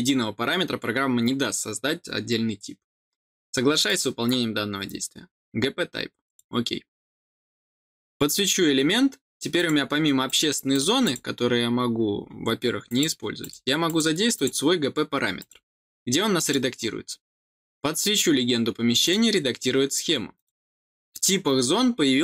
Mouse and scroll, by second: 3.8 click, 6.2 click, 7.7 click, 9.5 click, 10.2 click, 10.6 click, 11.0 click, 11.7 middle click, 11.7 scroll up 1, 11.8 scroll down 1, 12.8 click, 13.3 click, 13.8 click, 14.3 click, 15.3 click, 16.3 click, 19.0 click, 20.3 click.